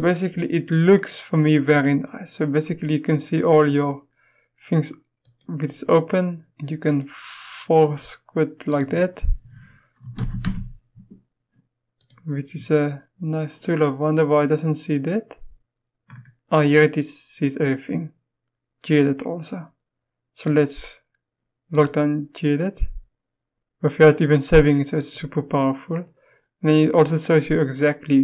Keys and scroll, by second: 10.0-10.4 typing.